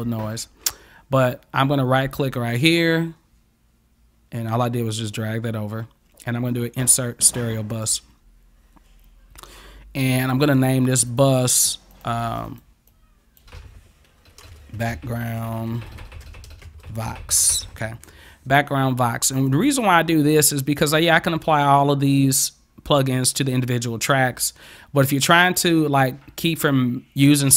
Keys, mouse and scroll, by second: 2.4 right click, 7.8 click, 10.5 click, 11.1 click, 11.3 click, 11.5 click, 11.9 click, 12.1 click, 12.5 click, 12.9 click, 14.4-17.1 typing, 19.4 click.